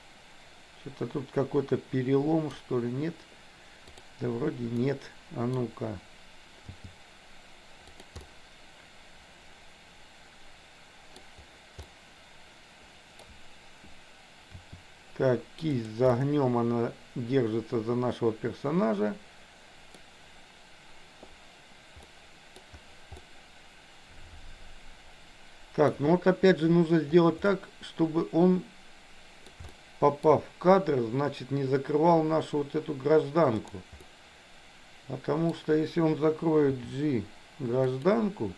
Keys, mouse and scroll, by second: 3.8 click, 4.8 middle click, 6.8 g, 8.3-11.1 middle drag, 11.9 scroll up 1, 12.0-13.3 middle drag, 14.6 r, 16.1-20.0 middle drag, 22.0 scroll up 1, 22.1 middle click, 22.5 scroll down 1, 23.1-25.8 middle drag, 27.4-29.5 middle drag, 29.6 shift+middle click, 33.6 click, 34.1-35.5 middle drag, 36.8 g.